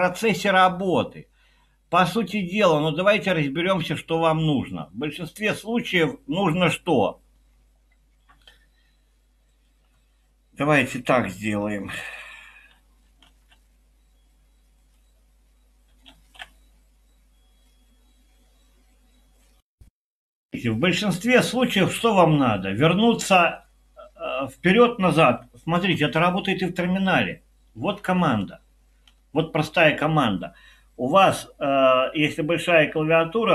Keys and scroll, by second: 13.4 alt+super+6, 16.2 alt+super+4, 25.9 ctrl+alt+t, 27.7-30.0 typing.